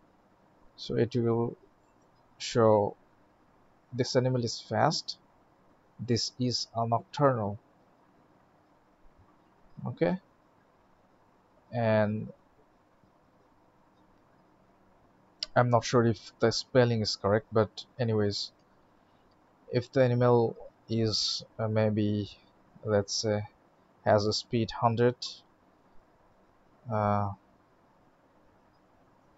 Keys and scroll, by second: 0.4 alt+shift+x, 24.9 ctrl+s, 26.7 alt+shift+x.